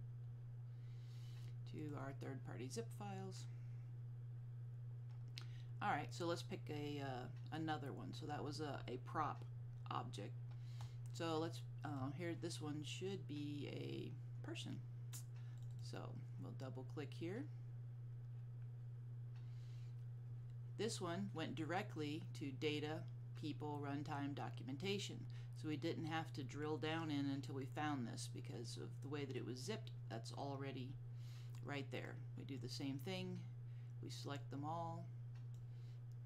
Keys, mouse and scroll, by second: 1.9 click, 12.0 click, 15.6 click, 15.8 double click, 32.2 click, 33.3 click.